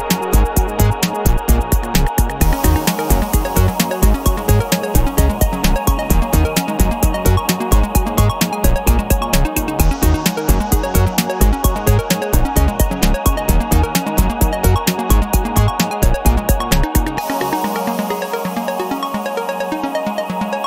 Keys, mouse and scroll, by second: 0.1 ctrl+z, 1.2 ctrl+z, 2.5 click, 2.9-4.1 middle drag, 4.6-9.6 middle drag, 9.9 0, 13.7 scroll down 2, 14.1-14.5 scroll up 2, 15.1 scroll up 2, 20.3 click.